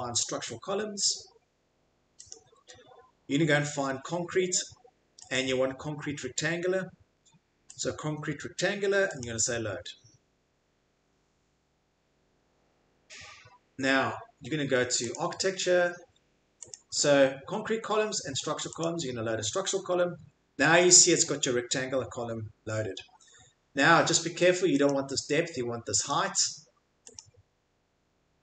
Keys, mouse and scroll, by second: 1.4 scroll, 2.3 click, 5.3 click, 7.8 click, 9.2 click, 15.1 click, 16.7 click, 18.8 click, 24.9 click.